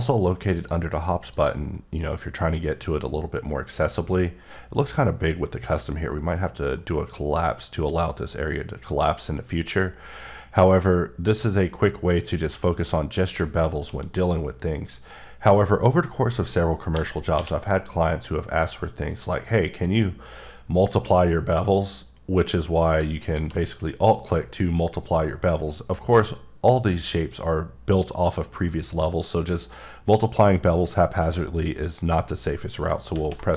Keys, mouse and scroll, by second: 16.4 middle click, 16.9 a, 17.3 q, 23.0 q, 23.2 alt+click, 32.9 ctrl+Num_Lock, 32.9 ctrl+click, 33.1 ctrl+z.